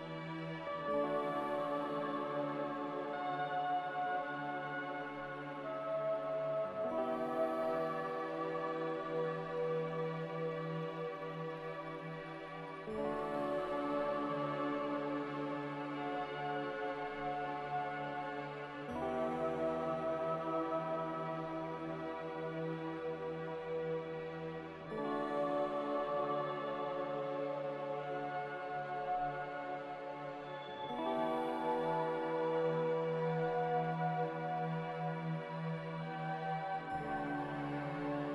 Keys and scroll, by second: 4.6-5.6 typing, 5.7 Return, 6.5 Delete, 10.6 g, 13.8 z, 16.9 Return, 19.3-20.2 typing, 22.0 g, 23.7 z, 25.9 Return, 32.1 x, 34.6 g.